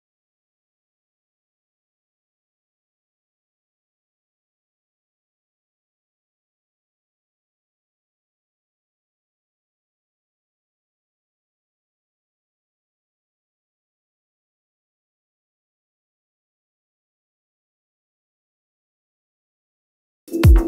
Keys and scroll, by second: 3.1 BackSpace, 4.3-5.7 typing, 5.9 Return, 6.9 super+t, 7.0 super+z, 9.5 BackSpace, 10.6 0, 10.8 BackSpace, 11.0 Return, 11.4 1, 11.6 Return, 11.9 Right, 12.1 0, 12.4 Return, 13.0 Right, 16.0 Right, 16.4 Down, 17.5 Right, 18.3 Right.